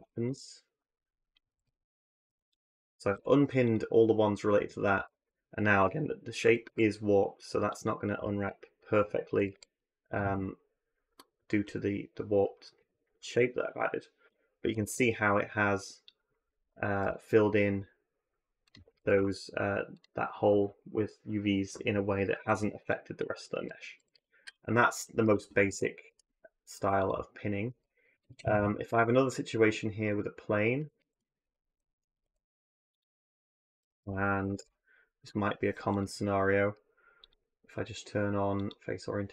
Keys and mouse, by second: 0.1 a, 1.3 a, 1.4 a, 2.1 a, 2.9 u, 4.8 a, 5.0 a, 6.5 a, 7.6 click, 9.2 a, 9.3 a, 14.5 a, 14.7 a, 16.8 r, 18.8 a, 18.9 a, 23.8 a, 23.9 a, 25.0 Tab, 25.5 Tab, 25.9 Tab, 26.5 x, 28.1 ctrl+a, 28.7 shift+a, 30.8 ctrl+z, 31.3 shift+s, 32.0 shift+a, 33.6 r, 37.1-38.8 drag, 39.2 Tab.